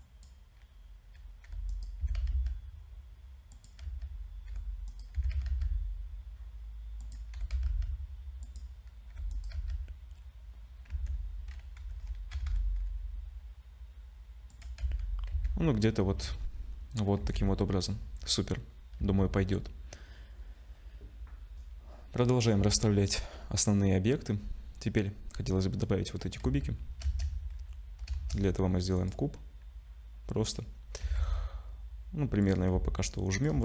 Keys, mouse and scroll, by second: 1.5 g, 2.0 s, 3.8 z, 4.5 g, 5.1 s, 7.3 g, 9.1 g, 9.5 z, 10.9 Tab, 11.8 g, 14.8 z, 15.3 Tab, 15.6-16.4 scroll down 4, 16.4-17.2 scroll up 6, 17.2 ctrl+s, 17.8-18.8 scroll down 4, 19.0 z, 26.4 z, 27.0 shift+a, 28.1 shift+a, 31.0 s, 32.7 s.